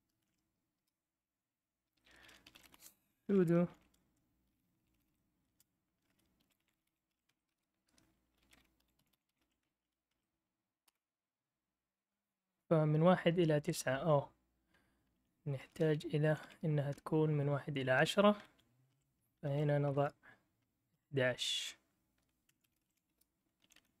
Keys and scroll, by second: 0.0-9.9 typing, 10.1 Tab, 10.9 Return, 15.1 Up, 15.7 Return, 16.2 Down, 16.4 Down, 16.9-18.0 Right, 18.4 Left, 18.9-19.9 typing, 20.9-24.0 typing.